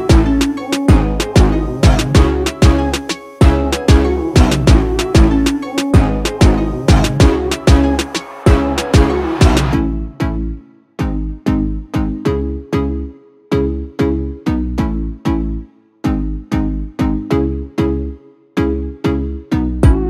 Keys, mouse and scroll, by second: 4.1 click, 6.4-18.8 drag, 10.8 typing.